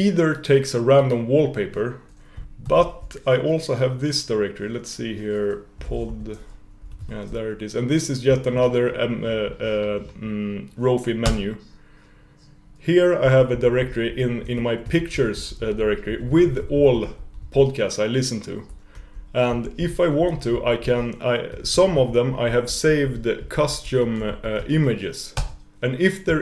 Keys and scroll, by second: 2.7 alt+e.